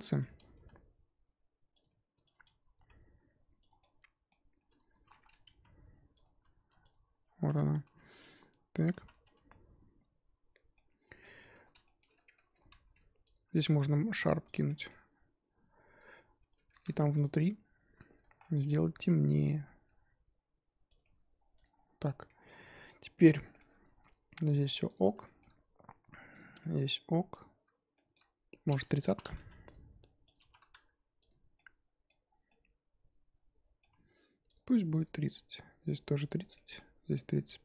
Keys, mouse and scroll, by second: 0.2 click, 0.5 g, 2.3 click, 2.3-2.7 scroll up 2, 2.8 g, 3.8-5.6 middle drag, 5.6 z, 6.2 alt+click, 6.9 alt+click, 7.4 z, 7.8 s, 9.0 z, 9.2 scroll down 2, 9.2 Tab, 9.5-11.5 middle drag, 11.5 Tab, 11.8-13.3 shift+middle drag, 13.3 alt+click, 14.5 right drag, 14.7 Tab, 14.8-16.4 middle drag, 16.4 Tab, 16.7 3, 17.2 alt+click, 18.9 click, 19.2 g, 21.0 Tab, 21.6 click, 21.7-22.4 scroll down 3, 22.4-23.4 scroll up 2, 23.4-24.5 scroll down 5, 23.5 Tab, 24.5 click, 24.9 click, 25.2-26.8 shift+middle drag, 26.8-27.4 scroll up 1, 27.4 click, 27.9 shift+middle drag, 28.2-29.3 scroll up 2, 29.3 click, 30.7-31.2 drag, 31.5-32.2 middle drag, 32.2 scroll down 3, 32.5-34.5 middle drag, 34.5 click, 35.0 click, 36.5-37.1 middle drag, 37.1 scroll up 2.